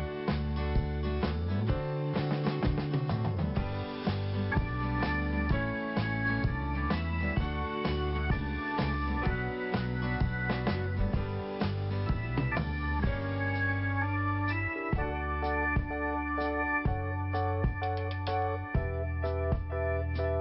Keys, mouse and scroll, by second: 0.1 click, 2.4 scroll down 1, 3.1 scroll up 1, 4.9 click, 7.1 t, 8.7 click, 9.9 click, 10.0 click, 10.3 click, 11.9 click.